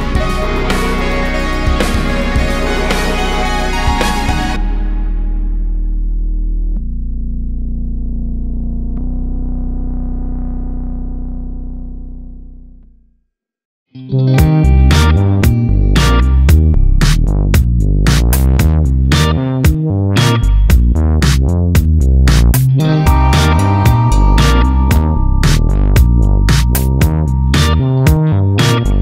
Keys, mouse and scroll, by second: 2.9-6.9 drag, 17.6-22.6 drag, 25.0 KP_Divide, 25.5 KP_0, 28.4 click, 28.9 alt+a.